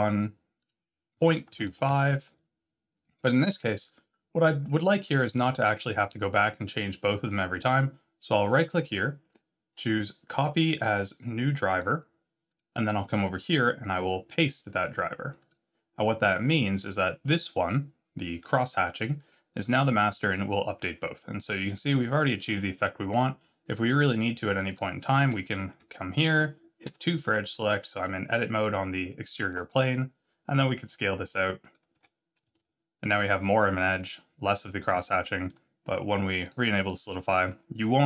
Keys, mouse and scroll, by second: 0.5 click, 5.8 click, 8.6 right click, 12.4 click, 13.3 right click, 17.3 click, 19.6 click, 22.3 click, 22.5 middle click, 22.9 click, 24.6 click, 25.1 z, 26.8 Tab, 26.8 2, 29.4 alt+click, 29.7-30.5 scroll down 4, 30.5 s, 31.9 Tab, 32.4 z, 32.9-33.5 scroll up 2, 33.9 click, 35.2 middle click, 36.4 click, 36.7 click, 37.0 middle click, 37.4 scroll up 4.